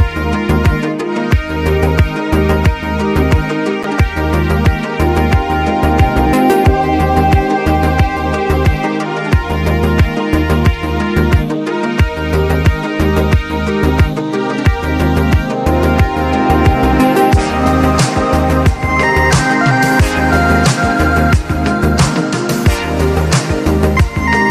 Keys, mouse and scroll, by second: 1.8-4.6 drag, 4.7 click, 6.2-8.6 drag, 10.2-12.3 drag, 13.3-13.7 typing, 13.7 click, 15.1-17.3 drag, 15.1 typing, 17.3 ctrl+z, 17.3 typing, 18.2-21.1 drag, 21.8 click, 23.3 click.